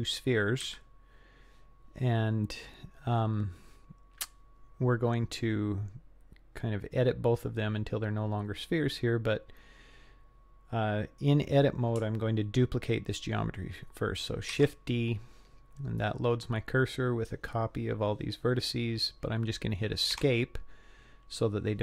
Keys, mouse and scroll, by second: 0.6 KP_3, 2.4 scroll down 1, 3.2-3.9 scroll up 3, 3.9 scroll down 1, 5.0-5.7 scroll down 1, 6.1-6.6 scroll up 1, 9.2 scroll down 1, 14.5 shift+d.